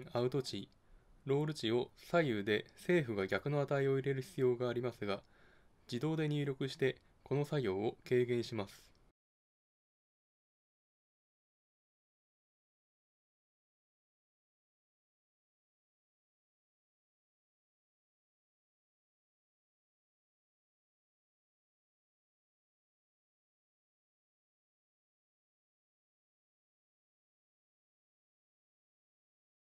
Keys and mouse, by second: 6.6-9.1 drag, 13.8-15.7 drag, 17.8-19.8 drag, 22.7-24.5 drag, 27.5-29.1 drag, 29.1 middle click.